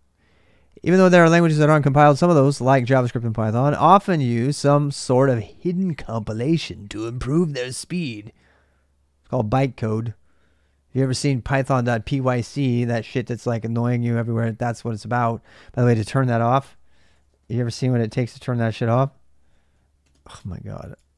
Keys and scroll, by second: 16.9-21.1 typing.